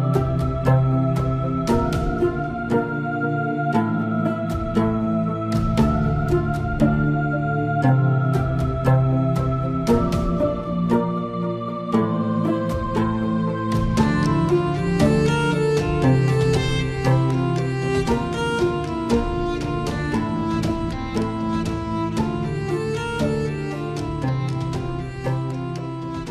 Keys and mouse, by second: 0.3-1.6 middle drag, 3.3-6.7 shift+drag, 7.0-11.8 shift+drag, 12.9-14.2 shift+drag, 14.6-17.5 shift+drag, 17.8 middle click, 19.6-26.3 shift+drag.